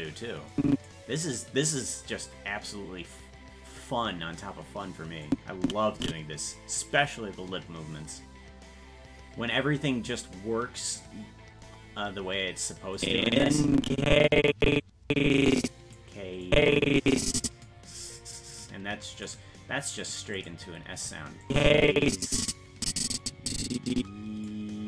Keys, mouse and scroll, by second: 0.6 click, 5.3-6.6 drag, 13.0-16.0 drag, 16.5-17.7 drag, 19.2 click, 20.4 click, 21.5-24.5 drag.